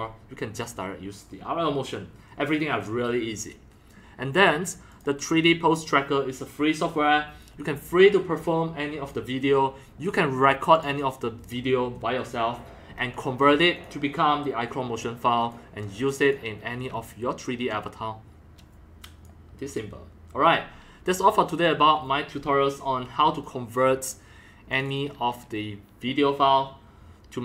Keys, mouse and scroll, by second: 0.5 click, 0.6-4.8 drag, 4.9 click, 6.9-10.1 drag, 10.7 click, 13.7 click, 14.2-14.7 drag, 15.4 click, 16.2 click, 17.7-19.2 drag, 22.8 click, 24.7 click, 24.8 click, 25.6-27.4 drag.